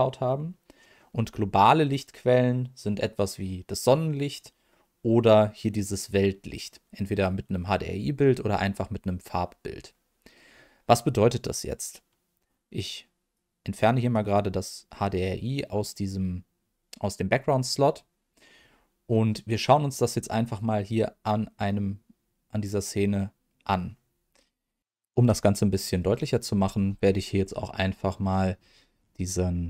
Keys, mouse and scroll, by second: 3.8 click, 13.3 click, 19.2-20.0 middle drag, 20.2-20.6 scroll down 1, 20.6 middle click.